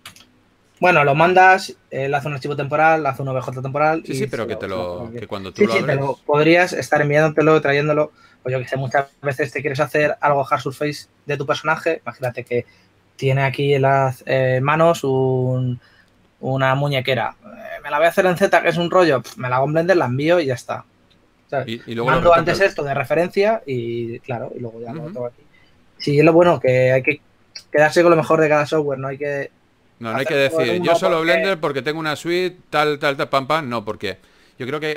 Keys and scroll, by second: 5.6 shift+f, 25.4-26.6 typing, 34.3-34.9 typing.